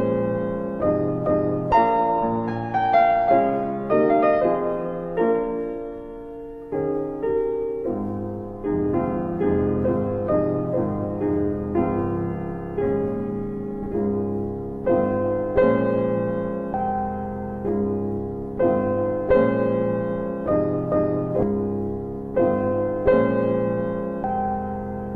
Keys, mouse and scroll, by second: 0.7 ctrl+click, 0.8 ctrl+double click, 2.7 double click, 5.5 ctrl+click, 6.0 ctrl+double click, 7.1 click, 7.3 double click, 7.9 click, 9.3 middle click, 10.4 click, 11.8 s, 13.6 y, 14.8 click, 17.2 click, 18.3 alt+middle click, 20.3 click, 21.6 alt+w, 22.2 alt+w, 22.6 z, 23.1 middle click, 23.2-24.2 scroll down 1, 24.2 click.